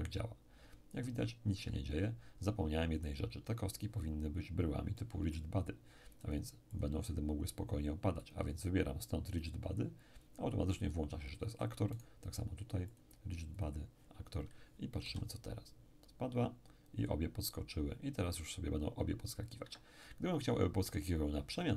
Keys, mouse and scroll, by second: 1.6 Escape, 5.0-7.8 middle drag, 6.2-7.8 drag, 8.2 click, 9.4 click, 12.0-14.6 right drag, 12.9-14.6 drag, 15.0 p, 19.6 Escape.